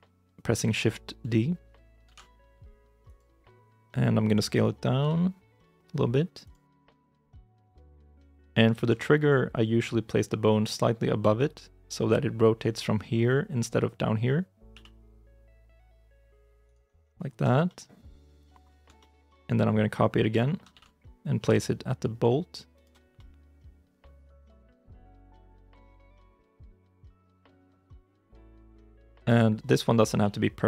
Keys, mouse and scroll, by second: 1.9 shift+d, 4.9 s, 6.7 g, 7.9 scroll, 7.9 scroll up 1, 8.4 shift+middle click, 14.6 g, 16.9-17.3 scroll down 1, 17.5 shift+middle click, 18.8 shift+middle click, 20.6 shift+d, 23.0 middle click, 25.8 KP_1, 26.1 KP_3, 26.4 KP_9, 27.3-27.7 scroll up 1, 27.7 g, 28.5 shift+i, 28.7 shift+z, 29.0 shift+middle click, 29.5 scroll up 1, 30.1 g.